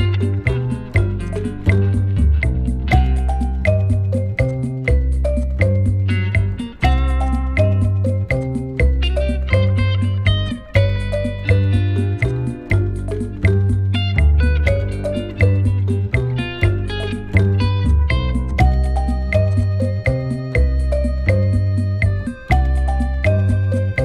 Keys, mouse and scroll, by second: 0.5 ctrl+j, 1.3 double click, 1.7-3.1 typing, 3.2 Return, 4.8 Delete, 5.7 alt+scroll down 1, 6.8 double click, 10.4 ctrl+click, 11.7 ctrl+g, 12.2 double click, 15.0-15.9 typing, 16.0 Return, 19.5 double click, 20.0-21.4 typing, 21.5 Return.